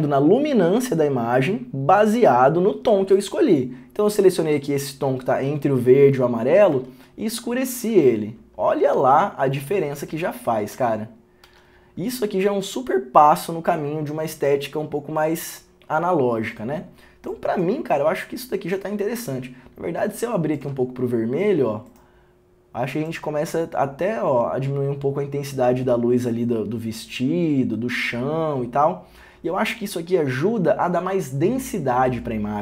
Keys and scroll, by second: 7.0 ctrl+d, 7.9 ctrl+d, 9.1 ctrl+d, 11.6 ctrl+d, 20.5 ctrl+d.